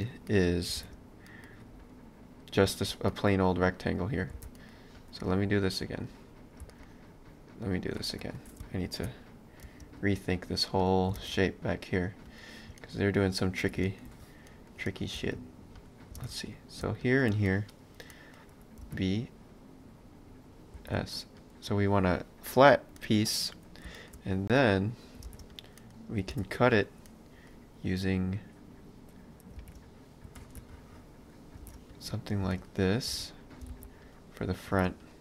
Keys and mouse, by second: 0.8 ctrl+space, 1.3 middle click, 1.8 click, 2.8 shift+middle click, 3.9 click, 4.4 shift+d, 5.3 click, 6.6 space, 8.8 shift+x, 9.6 space, 10.8 click, 11.2 shift+space, 12.8 ctrl+middle click, 15.2 space, 16.5 click, 17.5 middle click, 18.8 b, 23.0 middle click, 24.6 click, 25.3 ctrl+space, 25.6 click, 25.8 middle click, 26.3 shift+d, 27.1 middle click, 29.6 ctrl+space, 30.4 ctrl+r, 31.7 ctrl+space, 32.0 click, 32.5 space, 33.3 ctrl+space, 33.5 click, 34.7 ctrl+space, 35.1 click.